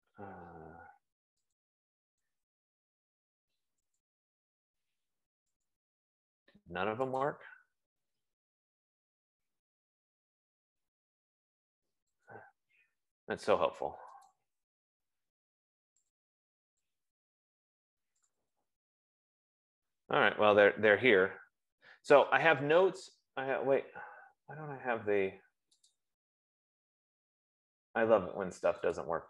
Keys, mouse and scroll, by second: 2.0 click, 4.3 click, 6.3 click, 7.8 click, 12.7 click, 14.7 click, 16.6 click, 16.8 click, 18.6 click, 19.1 click, 26.4 click.